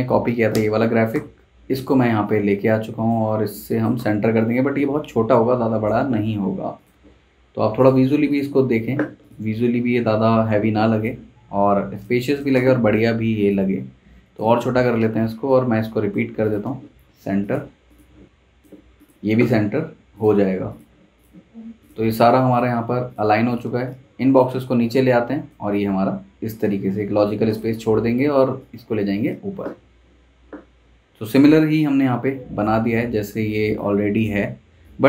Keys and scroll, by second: 0.2 super+c, 0.5 super+Tab, 1.1 super+v, 3.5 z, 4.0 v, 12.1 z, 12.5 v, 33.4 super+z.